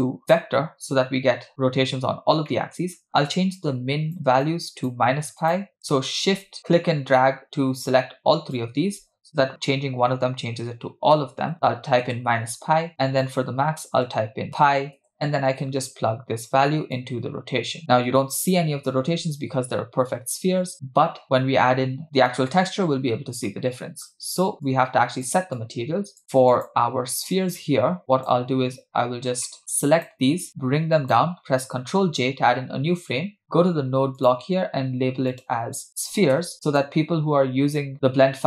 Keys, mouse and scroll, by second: 2.5 middle click, 2.9-3.3 scroll up 2, 3.6 shift+click, 4.4-5.4 shift+drag, 5.8-12.1 shift+drag, 13.2-15.0 shift+drag, 17.0-18.5 drag, 23.5 middle click, 24.6 click, 25.6 click, 26.2 middle click, 26.6 click, 27.6-28.0 scroll down 2, 28.0 click, 29.0-29.4 scroll down 2, 29.4 middle click, 29.6 click, 30.5 click, 32.0 ctrl+j, 34.1 click, 35.3-36.8 drag, 36.5 e, 37.9 click.